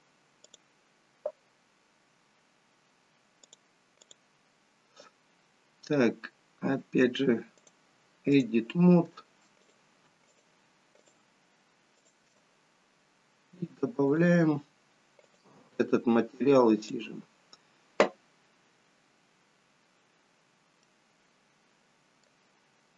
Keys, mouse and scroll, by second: 4.3 click, 7.6 click, 9.9 click, 10.2 shift+click, 11.0 shift+click, 14.1 click, 19.7 click, 19.7-20.2 scroll down 2, 20.2-20.9 scroll up 3, 20.9 middle click, 22.4-22.9 scroll down 3.